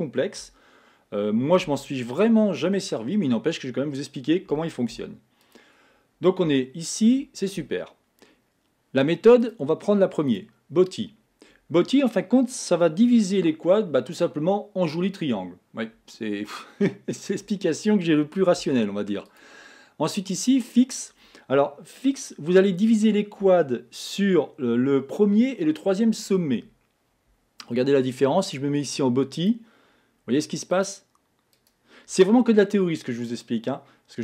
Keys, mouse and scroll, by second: 0.4 Tab, 1.6 x, 2.8 middle click, 3.5-4.9 scroll up 5, 4.9 Tab, 5.4 click, 6.6-9.4 shift+middle drag, 9.4-12.4 drag, 19.3-22.3 drag, 28.4-33.3 drag, 33.3-34.2 middle drag.